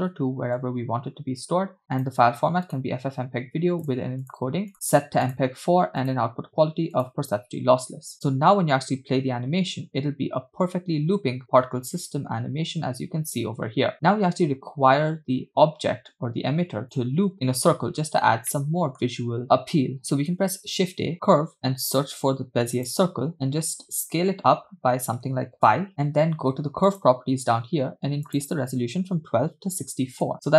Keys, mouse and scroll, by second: 0.1 click, 0.2 /, 1.4-1.8 scroll down 2, 2.0-2.9 drag, 3.3 scroll down 2, 4.0 click, 4.8-5.5 drag, 6.1-7.2 drag, 8.6 space, 14.0 space, 17.1 click, 18.2-18.6 scroll down 2, 18.6-19.1 middle drag, 19.6-19.9 scroll up 2, 20.4 shift+a, 23.9 s, 27.0 click, 28.4-30.2 drag.